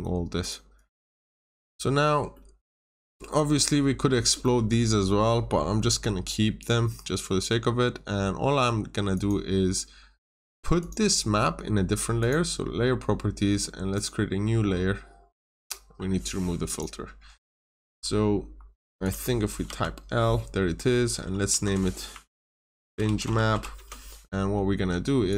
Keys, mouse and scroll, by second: 0.3 click, 1.3 Delete, 1.7-2.1 scroll up 1, 2.3 middle click, 2.8-4.1 scroll up 1, 4.1 scroll down 1, 4.3 middle click, 9.1 click, 17.9 scroll down 1, 19.0 click, 20.2 scroll down 1, 21.5 F2, 22.1-23.8 typing, 24.8 Escape, 25.2 click.